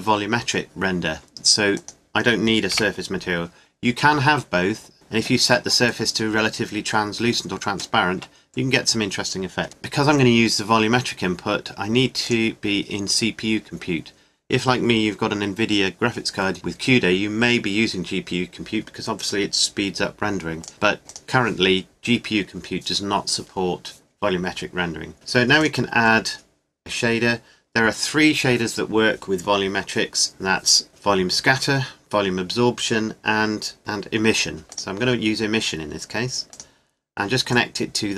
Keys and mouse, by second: 1.7-3.5 right drag, 2.7 Delete, 12.2-14.1 right drag, 14.3-20.6 middle drag, 20.6-21.7 drag, 21.7-24.3 middle drag, 25.6-27.4 drag, 27.4 middle click, 37.5-38.1 drag.